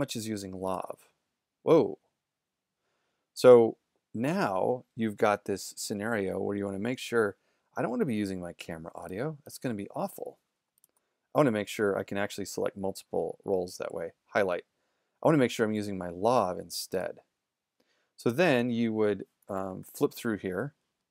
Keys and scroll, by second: 19.6 super+=.